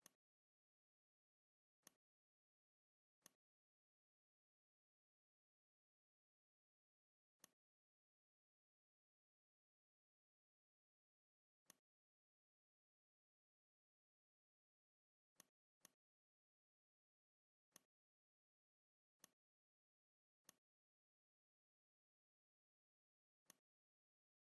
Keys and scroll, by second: 11.2 z, 12.5 v, 14.9 r, 16.6 v, 21.7 ctrl+shift+].